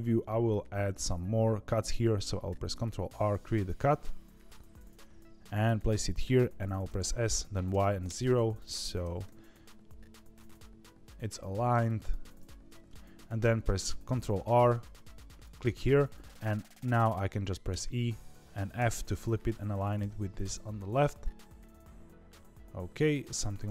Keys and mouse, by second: 2.4 ctrl+r, 6.8 s, 9.0 g, 13.4 ctrl+r.